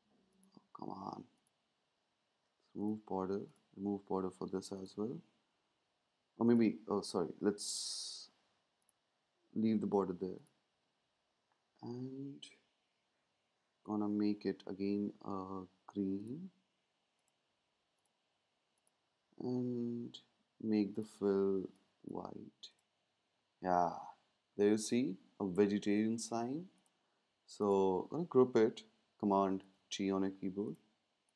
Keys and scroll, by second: 29.6 super+g.